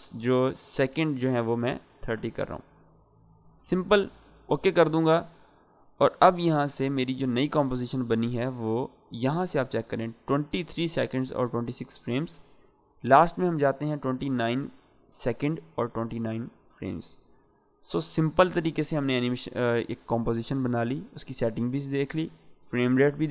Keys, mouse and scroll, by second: 1.0 BackSpace, 4.3-8.4 drag, 12.8-13.4 drag.